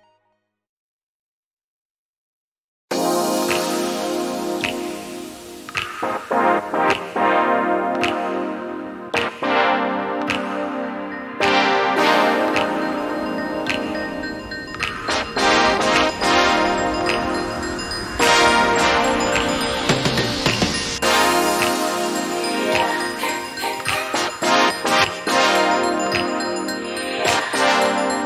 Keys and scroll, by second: 7.6 Return, 9.5 v, 10.7 Up, 10.9 Up, 11.0 Up, 11.3 Up, 11.5-12.8 Up, 13.0-13.4 Up, 13.6 Up, 13.7 Up, 13.8 Up, 14.0 Up, 14.1 Up, 14.2 Up, 14.3 Up, 14.5 Up, 14.6-15.1 Up, 15.2 Up, 15.3 Up, 15.7 Up, 15.8 Up, 16.0 Up, 16.2 Up, 16.4 Up, 16.5 Up, 16.8 Up, 19.9 ctrl+], 27.7 Down, 28.0 Down, 28.1 Down.